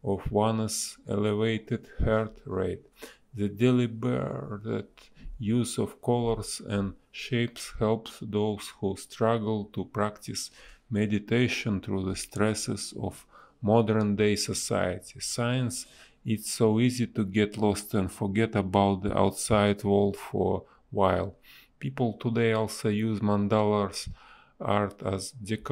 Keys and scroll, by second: 1.9 a, 4.0 a, 4.6 shift+e, 5.3 space, 6.3 space, 6.7 a, 17.5 ctrl+z, 18.7 Delete, 19.2 b, 22.1 space, 22.4 a, 24.8 space.